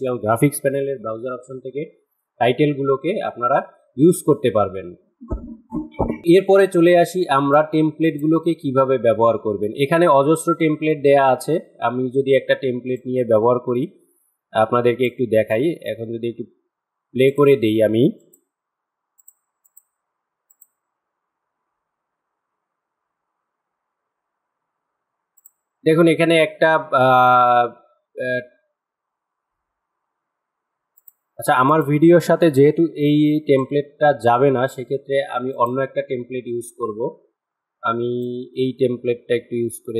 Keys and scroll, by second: 32.4 Delete.